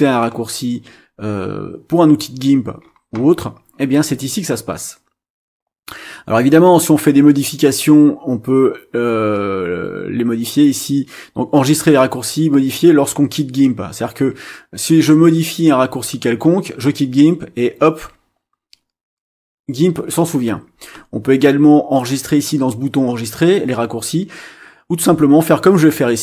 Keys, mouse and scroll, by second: 1.4 scroll up 2, 2.2 scroll down 2, 2.8-3.6 scroll up 4, 3.8 scroll up 2.